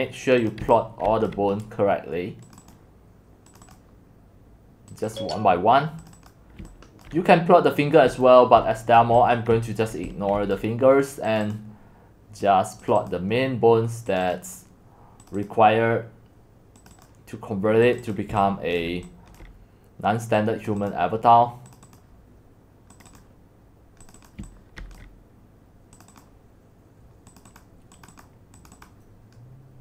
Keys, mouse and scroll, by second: 0.6-1.1 typing, 1.3 click, 2.7 click, 3.7 click, 5.0 click, 5.2 click, 6.3 click, 6.3 click, 7.5 click, 8.1-9.1 typing, 9.0 click, 9.9 click, 10.5-17.8 drag, 18.8 click, 19.4 click, 21.0 click, 23.0 click, 23.2 click, 24.3 click, 24.4-24.8 typing, 25.0-29.8 drag.